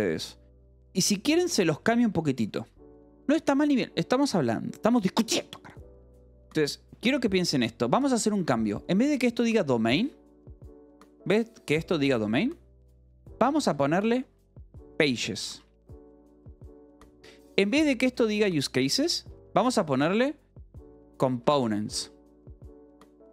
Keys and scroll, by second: 0.0 j, 10.8 h, 13.2-15.4 typing, 15.9 Escape, 17.1-21.9 typing.